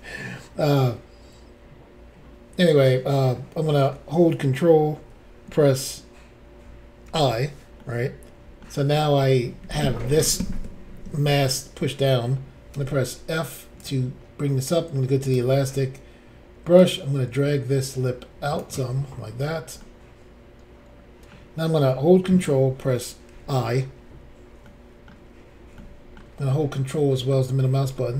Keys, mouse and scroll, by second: 7.1 ctrl+i, 7.8 middle click, 12.7 f, 13.8 click, 13.9 click, 15.3 click, 15.7-16.5 scroll down 1, 16.8 click, 19.8 middle click, 23.2 ctrl+i, 25.7 shift+middle click, 26.5 ctrl+middle click, 27.8 shift+middle click.